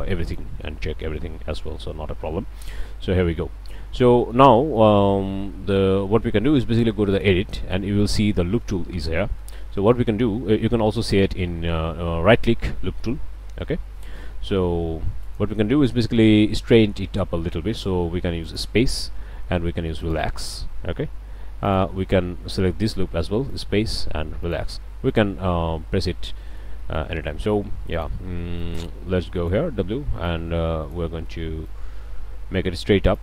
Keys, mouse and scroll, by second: 0.0 click, 0.2 click, 0.9-1.4 drag, 2.3 Tab, 3.2 click, 3.6 middle click, 4.2 drag, 9.4-9.8 shift+drag, 9.8-10.1 shift+scroll up 1, 11.0-11.3 scroll up 1, 13.7 Escape, 14.0 click, 14.0 scroll up 1, 14.1 drag, 15.2 alt+click, 18.4 click, 20.0 click, 21.1 a, 21.7-22.0 alt+drag, 21.9 alt+^, 23.5 click, 24.4 click, 25.1 click, 26.4 click, 26.8-27.3 shift+drag, 28.1 click, 28.6 click.